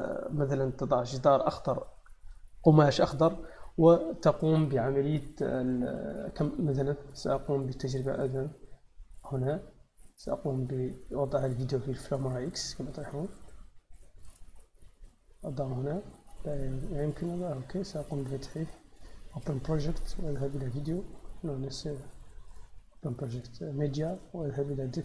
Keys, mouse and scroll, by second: 2.1 click, 7.0 click, 9.0 click, 11.4-14.2 drag, 14.6-25.0 drag.